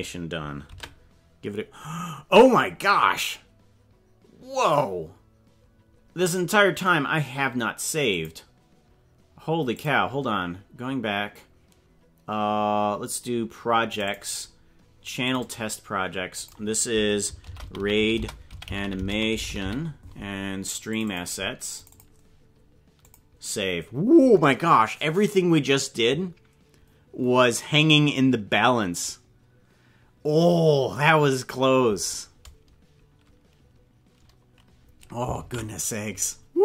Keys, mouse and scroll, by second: 0.8 ctrl+s, 35.6 ctrl+s.